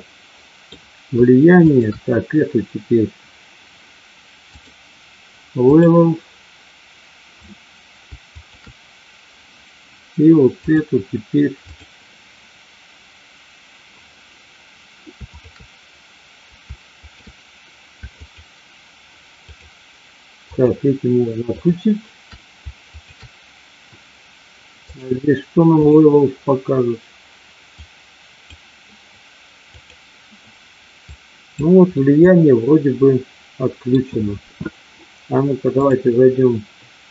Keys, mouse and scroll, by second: 1.7 shift+click, 4.6-5.8 drag, 8.3 shift+click, 10.7-11.8 drag, 15.3 shift+click, 16.9 shift+click, 18.2 shift+click, 19.4 shift+click, 20.6 shift+click, 21.4 shift+click, 22.9 shift+click, 24.8-25.9 drag, 27.8-30.1 drag, 31.2 click, 31.8-33.8 middle drag, 35.8-37.1 drag.